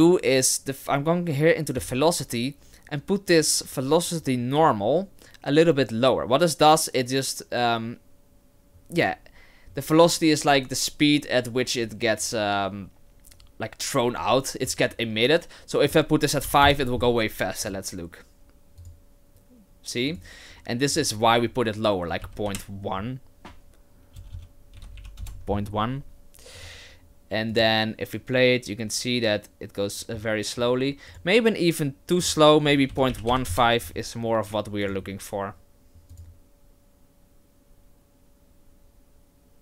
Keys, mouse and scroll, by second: 1.8 click, 15.9 click, 17.6 click, 18.8 click, 20.1 click, 20.9 click, 24.3 BackSpace, 26.6 click, 27.5 click, 31.1 click, 32.2 click, 34.8 click, 36.1 click.